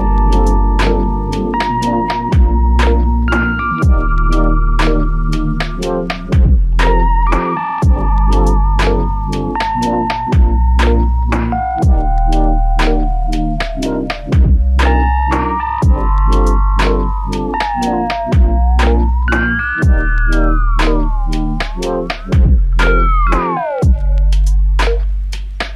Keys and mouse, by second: 0.0 shift+click, 1.0 shift+click, 3.5 double click, 5.4 shift+click, 9.2 double click, 13.9 shift+click, 14.9 alt+click, 16.6 f, 18.1 double click, 20.5 alt+click, 22.0 double click, 23.7 alt+click.